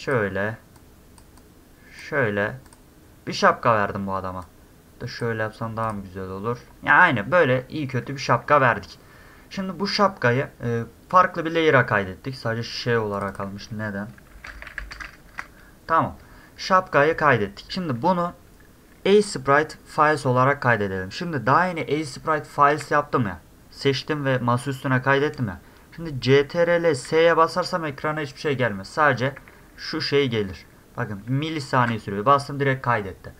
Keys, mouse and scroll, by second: 0.8 click, 1.4 click, 2.7 click, 4.4 click, 5.8 click, 6.7 scroll down 2, 7.6 scroll up 2, 13.1 click, 13.3 click, 14.5 a, 14.9 a, 24.2 middle click, 27.1 ctrl+s, 29.4 ctrl+s, 29.6 ctrl+s, 29.7 ctrl+s, 29.9 ctrl+s, 30.1 ctrl+s, 30.3 ctrl+s, 30.5 ctrl+s, 31.8 ctrl+s.